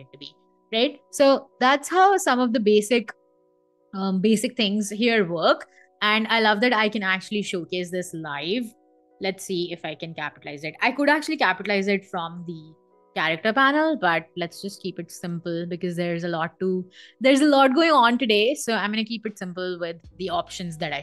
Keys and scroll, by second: 0.1 i, 6.2 v, 8.6-12.8 typing.